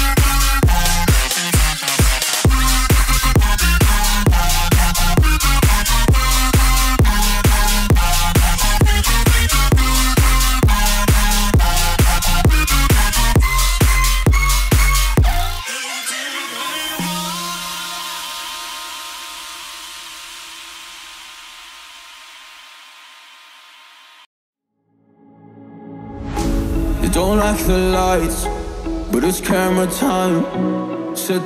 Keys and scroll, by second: 10.2 Up, 11.5 Up, 11.9 Up, 12.6 Left, 13.5 Left, 14.3 Left, 14.7 Left, 22.7 Up, 25.4 Up, 25.6 Up, 26.0 Up, 26.5 Up, 26.8 Up, 27.2 Up, 29.0 Up, 31.3 Up.